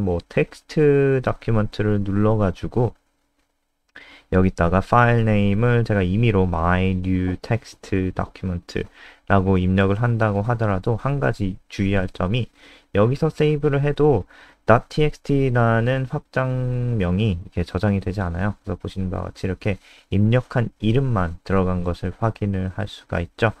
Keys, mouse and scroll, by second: 6.9-10.4 typing, 18.6 click.